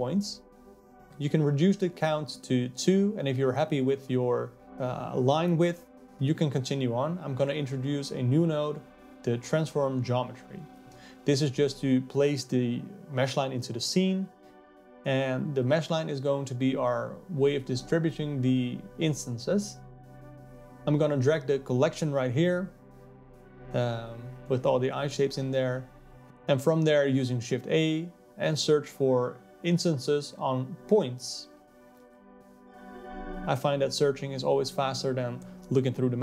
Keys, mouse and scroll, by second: 6.4 shift+a, 8.2-20.1 drag, 21.6 click, 24.5 click, 33.5 click.